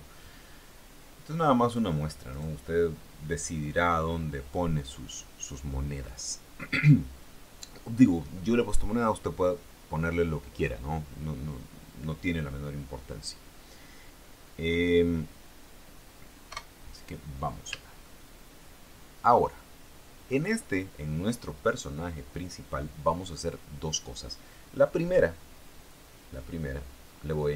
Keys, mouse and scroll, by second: 1.8 right click, 2.5 right click, 16.7 KP_0, 18.2-20.7 shift+middle drag, 26.6-27.5 drag.